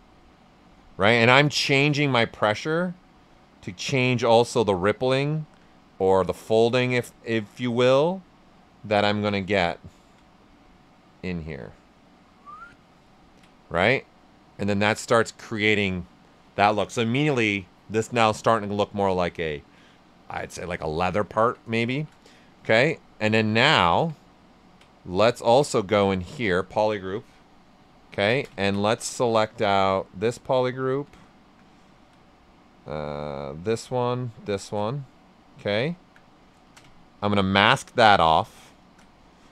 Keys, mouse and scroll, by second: 0.6 right click, 0.6 typing, 1.9-4.5 drag, 4.5 right click, 4.8 alt+right click, 6.0-7.4 drag, 7.4 right click, 8.4 click, 9.7 alt+right click, 10.5-13.0 drag, 13.0 ctrl+right click, 13.8 right click, 14.4 alt+right click, 16.6 right click, 18.4 right click, 21.0 alt+right click, 21.7-22.4 typing, 22.2 shift+right click, 22.8 shift+click, 23.2 shift+right click, 25.9 ctrl+shift+click, 28.3 ctrl+shift+click, 29.0 right click, 30.0 ctrl+shift+click, 31.0 typing, 31.1 alt+right click, 31.6 ctrl+right click, 32.3 right click, 33.6 ctrl+shift+click, 35.0 ctrl+right click, 36.6 ctrl+shift+click, 37.3 ctrl+click, 38.0 shift+f, 38.3 right click, 38.8 ctrl+shift+click, 39.1 right click.